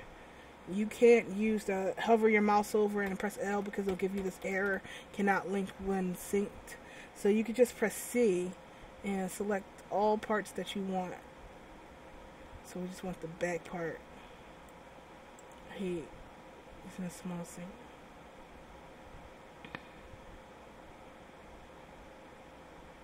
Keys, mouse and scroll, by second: 3.2 l, 4.3 l, 4.8 l, 7.8 c.